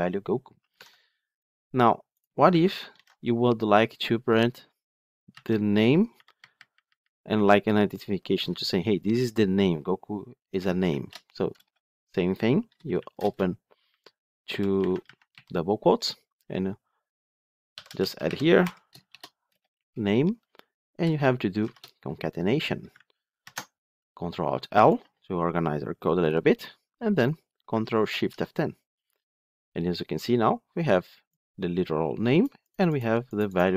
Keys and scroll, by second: 3.0 ctrl+alt+l, 23.4 ctrl+alt+l, 27.9 ctrl+shift+F10.